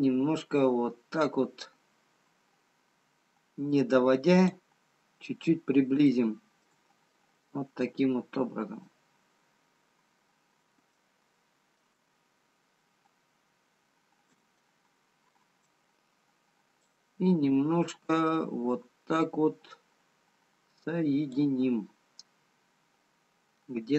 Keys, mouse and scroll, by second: 5.2-6.6 scroll up 4, 6.6 shift+middle click, 6.6 shift+scroll up 1, 7.6 middle click, 10.0-10.9 scroll up 7, 10.9 shift+middle click, 10.9-11.8 scroll up 2, 14.6 scroll up 1, 17.0 click, 23.1 scroll down 2.